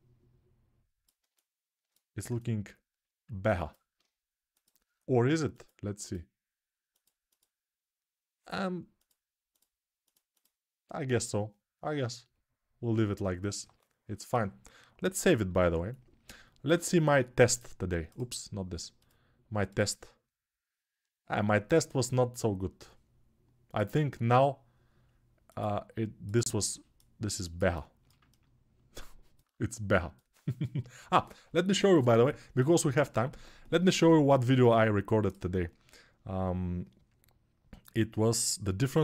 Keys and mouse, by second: 4.3-17.4 drag, 15.5 ctrl+s, 17.4-18.8 middle drag, 18.8-39.0 drag.